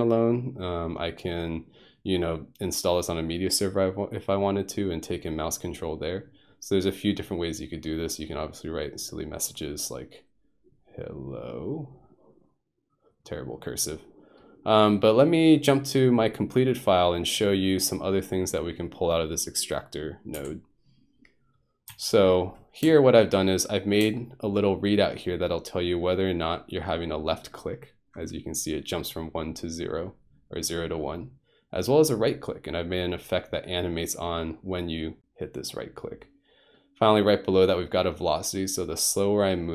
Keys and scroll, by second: 20.4 F2, 21.9 F1.